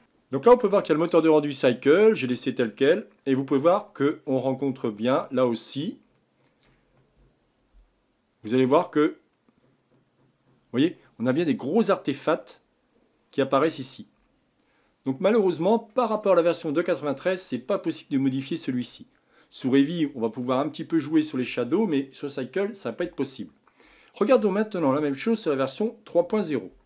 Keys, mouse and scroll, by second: 3.8-4.6 scroll up 10, 5.0-6.9 shift+middle drag, 6.9 scroll up 1, 7.5-9.9 scroll up 1, 14.7-15.9 scroll down 5, 15.9-19.0 middle drag.